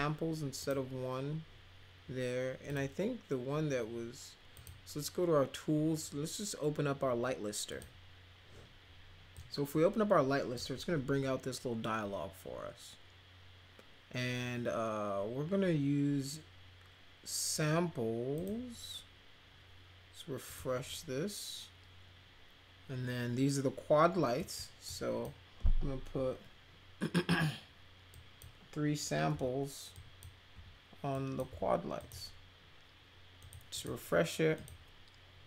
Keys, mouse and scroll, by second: 0.6 click, 2.6 click, 4.5 click, 7.7 click, 9.3-10.5 drag, 18.3 click, 20.4 click, 24.3 click, 24.8 click, 28.1 click, 29.3 3, 29.9 click, 30.5 3, 31.1 click, 31.4 3, 31.9 click, 33.4 click, 33.7 click, 34.5 click.